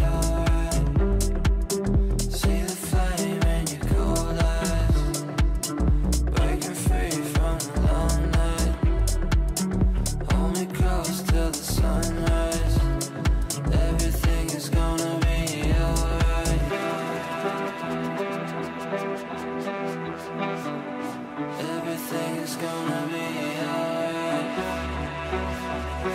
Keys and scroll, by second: 1.9 c, 2.1 e, 4.3 c, 14.0 c.